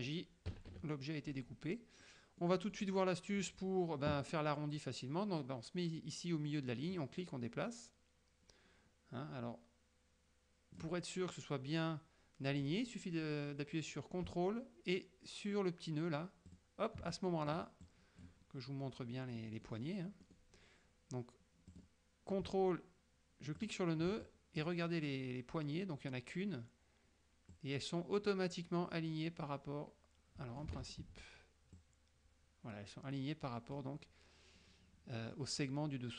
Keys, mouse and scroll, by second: 0.6 KP_Subtract, 2.5 middle click, 7.0-11.1 drag, 16.6 ctrl+click, 17.2 ctrl+click, 17.9 ctrl+click, 19.5 middle click, 20.3 middle click, 21.7 click, 23.7 ctrl+click, 24.3 ctrl+click, 27.6-30.9 drag, 30.9 ctrl+z, 31.8-34.0 drag.